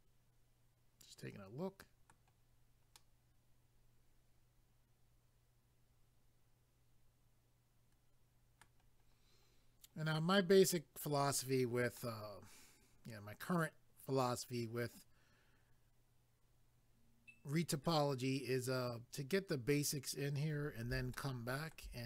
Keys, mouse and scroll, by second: 3.0 middle click, 9.1 scroll down 1, 12.0 middle click, 21.1 shift+middle click.